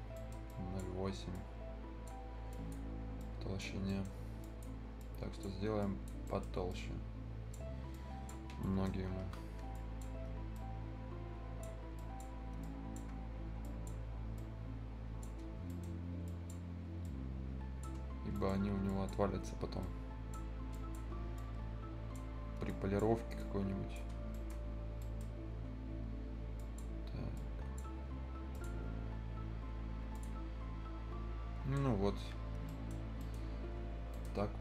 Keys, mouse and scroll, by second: 0.0 scroll down 1, 0.1 right click, 0.4 click, 0.9 scroll up 1, 1.3 click, 2.1 scroll down 1, 2.3 scroll up 1, 2.5 click, 3.7 scroll down 1, 3.8 right click, 4.2 scroll up 1, 4.4 click, 6.2 right click, 6.7-8.4 drag, 8.4 scroll down 1, 8.6 right click, 9.2 F10, 9.3 scroll up 1, 9.7-13.1 drag, 13.1 scroll down 1, 13.2 scroll up 1, 13.6 click, 15.4 scroll down 1, 15.6 right click, 15.9-16.2 scroll up 1, 16.2 click, 17.9 scroll down 1, 18.1-18.8 scroll up 2, 18.3 right click, 18.8 click, 22.2 scroll down 1, 22.4 scroll, 22.6-24.1 drag, 24.1-24.7 scroll down 2, 24.3 right click, 24.7 scroll up 1, 25.0 right click, 25.6 scroll down 1, 25.9-26.4 scroll up 1, 26.5 click, 26.6 click, 28.8 scroll down 1, 29.2-30.1 scroll up 1, 30.1 click, 31.9 scroll up 1, 32.2 Escape, 32.3 scroll down 1, 32.6 right click, 33.5 scroll up 1, 34.1 right click, 34.3 scroll down 1.